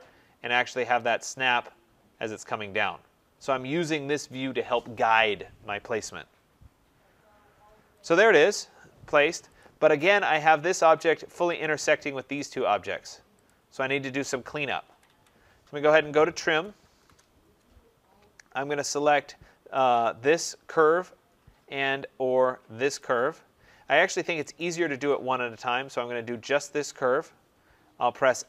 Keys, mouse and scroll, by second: 1.1 click, 7.9 click, 8.1 click, 9.5 click, 10.0 middle click, 10.2 middle click, 10.7 click, 11.5 click, 12.4 click, 13.4 click, 14.7 Escape, 15.0 Escape, 16.1-17.2 typing, 19.8 click, 22.9 click, 24.5 ctrl+click, 28.3 Return.